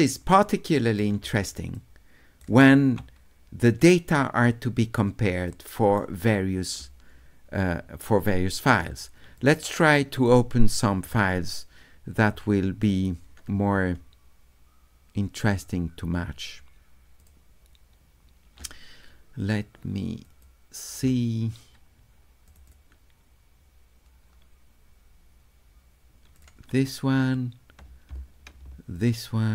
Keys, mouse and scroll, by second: 0.1 right click, 1.7 shift+middle click, 4.2 middle click, 5.5 right click, 9.3 click, 10.3 click, 12.8 click, 17.2 click, 20.3 click, 22.5 click, 22.7 click, 26.4 click, 28.9 ctrl+click.